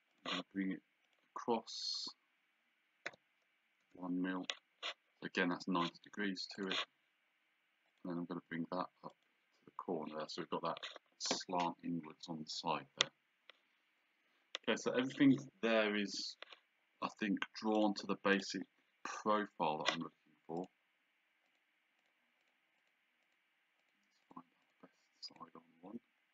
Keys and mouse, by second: 0.1 click, 3.1 KP_1, 3.8 KP_Enter, 6.6 click, 7.9 click, 9.1 click, 17.8 click, 20.6 click.